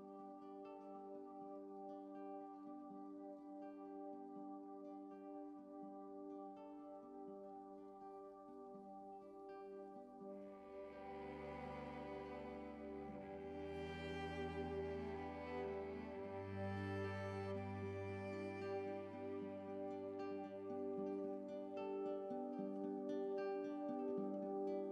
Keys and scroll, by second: 8.0 x, 9.6 x, 10.1 ctrl+z, 12.3 x, 13.4 x.